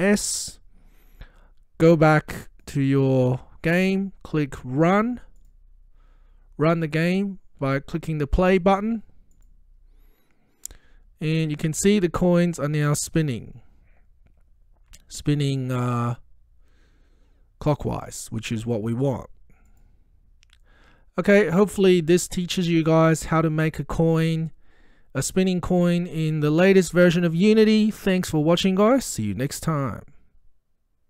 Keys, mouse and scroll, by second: 0.2 ctrl+s, 2.7 click, 5.4 click, 9.4 click, 13.0-13.3 scroll up 1, 19.8 click.